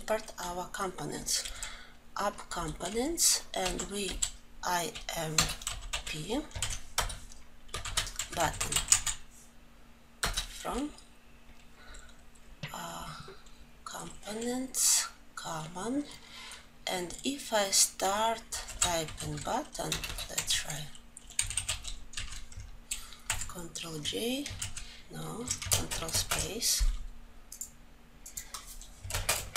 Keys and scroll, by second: 6.3 ctrl+j, 6.6 Return, 22.9 ctrl+j, 27.1 alt+Home, 28.8 ctrl+space.